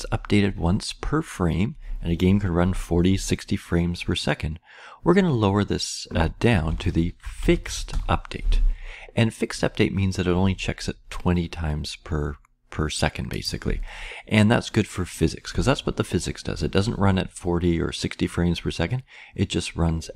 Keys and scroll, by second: 6.6-8.3 typing.